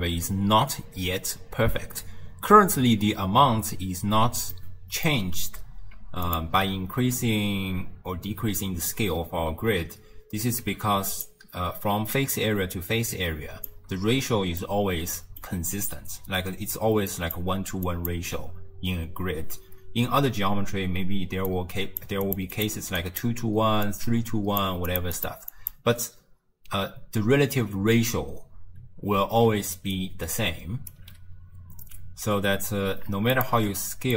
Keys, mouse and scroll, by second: 4.6-6.3 middle drag, 6.3 alt+shift+click, 10.7 z, 12.4-14.2 drag, 14.2-14.6 scroll up 1, 14.6-15.6 middle drag, 15.6-16.2 scroll up 1, 16.2-18.9 typing, 17.2 click, 17.9 click, 21.3-25.8 typing, 21.5 click, 22.3 click, 22.6 click, 23.0 click, 23.9 click, 24.9 click, 25.2 click, 25.6 click, 27.5 d, 29.7 d, 30.0-31.0 right drag, 31.0 d, 31.8 d, 33.4 alt+shift+click.